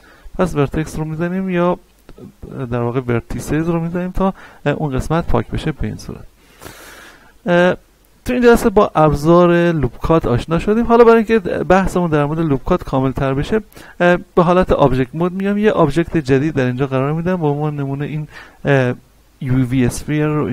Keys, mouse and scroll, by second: 2.0-5.3 middle drag, 5.3 Tab, 6.7-8.6 shift+middle drag, 8.6-13.9 shift+middle drag, 13.9-15.4 scroll down 1, 15.8 shift+a, 20.2-20.5 drag.